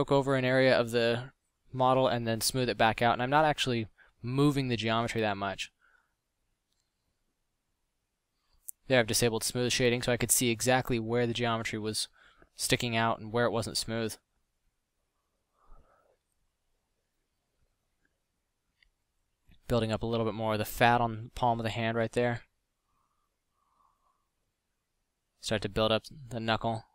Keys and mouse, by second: 0.7 f, 2.9 drag, 6.2 f, 10.8 f, 12.5 middle drag, 17.1 middle drag, 23.5 f.